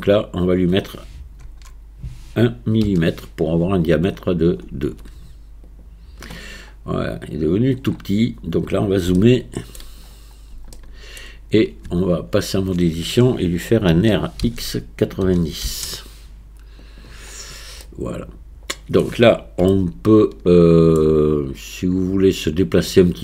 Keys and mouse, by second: 0.3-5.7 drag, 9.2-9.8 shift+middle drag, 10.8 shift+middle click, 11.9 Tab, 13.9 r, 17.8-19.0 middle drag, 19.7-21.0 shift+middle drag.